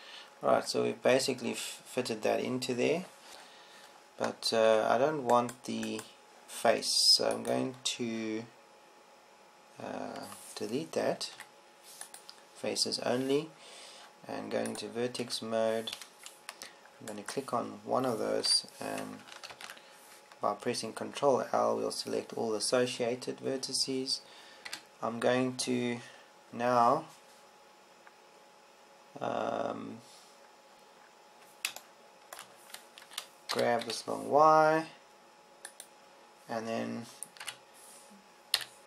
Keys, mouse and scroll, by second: 3.3 Tab, 3.4 Tab, 4.3 Tab, 6.2 Tab, 9.2-11.0 drag, 12.9 Delete, 20.0 l, 21.1 ctrl+l, 26.2 KP_7, 35.0 g.